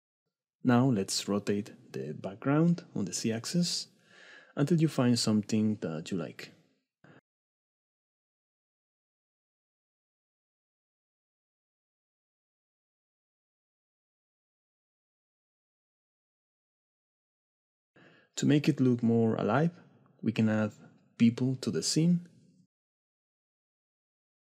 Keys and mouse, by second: 0.6 middle click, 1.8 click, 3.8 middle click, 4.4 click, 5.3 click, 5.7 click, 6.1 middle click, 6.3 shift+click, 6.3 middle click, 6.5 shift+click, 6.9 click, 7.7 click, 7.8 middle click, 8.1 click, 9.5 click, 11.0 click, 11.7 middle click, 14.8 click, 15.0-16.0 middle drag, 19.5 middle click, 20.4 middle drag, 24.2 click.